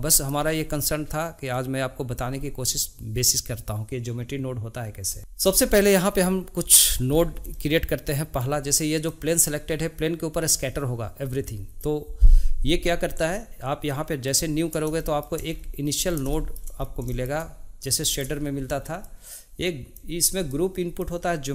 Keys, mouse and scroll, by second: 0.0-1.5 middle drag, 1.5-4.7 drag, 5.2 shift+middle click, 9.0 click, 13.8 click, 15.0-15.5 shift+middle drag, 15.5-16.3 scroll up 10, 16.3-16.8 shift+middle drag, 16.8 scroll up 1, 17.1-19.0 shift+middle drag, 19.0 click, 20.5-21.5 drag.